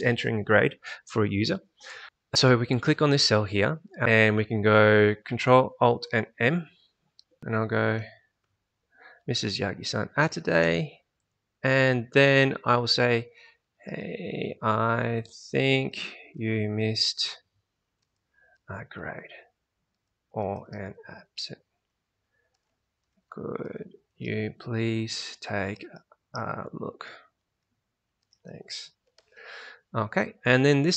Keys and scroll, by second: 7.4-9.0 typing, 13.2-29.5 typing.